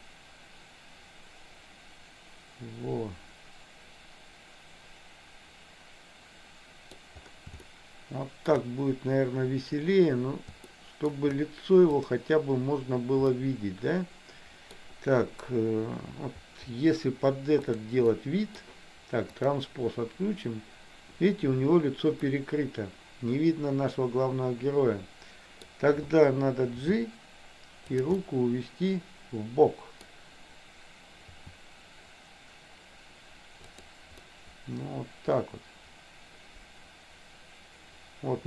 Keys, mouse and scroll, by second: 7.7 shift+middle click, 10.8 shift+middle click, 13.4-14.8 middle drag, 18.2 middle click, 19.3 click, 22.5-25.7 middle drag, 26.9 g, 28.3-30.2 middle drag, 31.4 r, 34.3-38.4 middle drag.